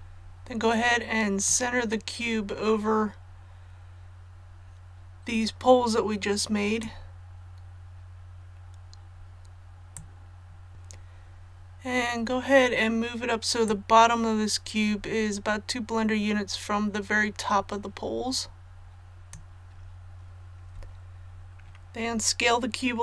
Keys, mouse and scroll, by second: 1.4-19.4 drag.